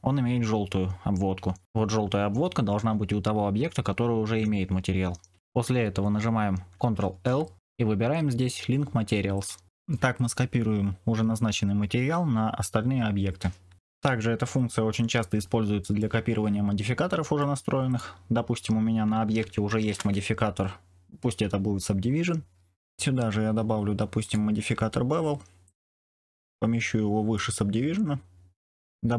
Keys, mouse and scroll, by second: 6.9 ctrl+l, 16.0-17.3 middle drag, 19.7 ctrl+2, 22.8 click, 24.1-25.8 drag, 27.3-28.7 drag.